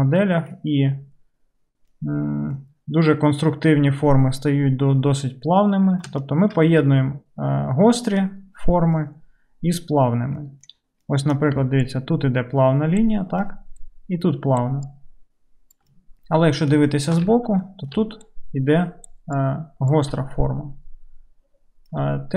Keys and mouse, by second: 11.7 d, 11.9-21.4 drag, 13.1 d, 13.3-15.0 d, 15.0-22.3 middle drag, 15.0-21.4 right drag, 15.8 d, 16.0 d, 18.0-19.4 d, 20.1 d, 20.2 d.